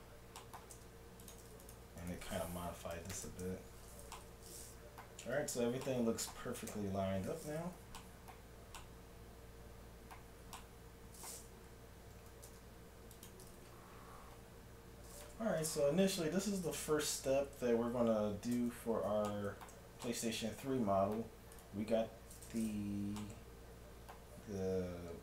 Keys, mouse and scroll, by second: 0.4 middle click, 0.7 ctrl+Tab, 1.7-3.9 right drag, 2.8 s, 4.2 middle click, 5.2 a, 6.1 middle click, 6.7 KP_1, 7.5 middle click, 8.0 middle click, 10.2 middle click, 10.5 middle click, 12.5 ctrl+Tab, 17.3 Tab, 18.6 alt+h, 19.7 a, 21.5-23.2 right drag, 23.2-24.9 middle drag.